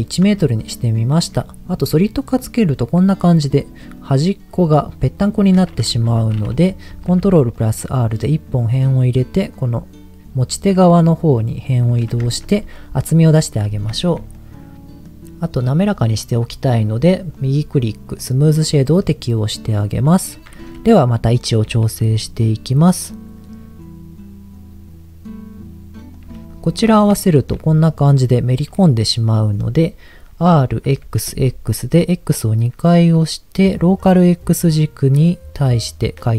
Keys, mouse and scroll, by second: 0.4 shift+middle click, 3.8 middle click, 5.6 middle click, 6.1 Tab, 6.9 ctrl+r, 11.8 click, 12.3 Tab, 14.0 shift+middle click, 14.4 middle click, 17.3-18.5 right drag, 19.0 middle click, 19.9-20.8 scroll up 2, 21.6 g, 21.8 z, 26.1 click, 27.2 shift+middle click, 29.7 middle click, 30.3 r, 30.8 x, 31.3 x.